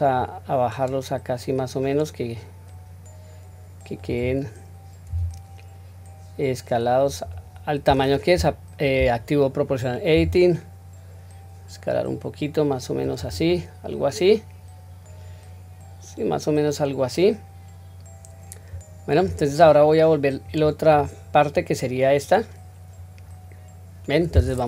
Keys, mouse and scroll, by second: 5.0 s, 10.0 s, 13.4-19.2 middle drag, 20.3 click, 21.5-24.1 middle drag.